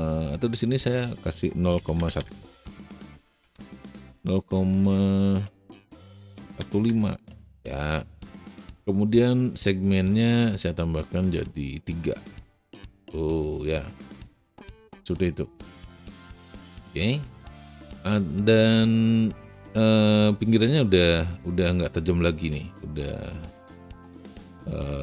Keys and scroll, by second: 1.7 KP_Decimal, 1.9 KP_0, 2.1 KP_5, 3.3 Return, 6.3 KP_Decimal, 6.3 KP_1, 6.6 KP_5, 6.8 Return.